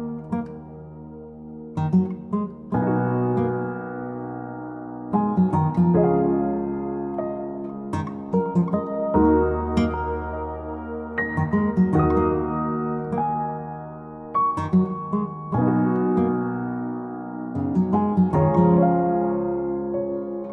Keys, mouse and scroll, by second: 0.6 click, 1.0 click, 3.0 Escape, 3.4 click, 4.3 d, 5.8 click, 6.2 middle click, 6.2 middle click, 6.3 middle click, 7.0 click, 7.8-8.8 scroll up 10, 9.0 click, 9.3-10.1 scroll down 10, 11.2 o, 11.9 click, 12.9 m, 13.9 click, 14.5 Right, 16.3 click, 19.5 click.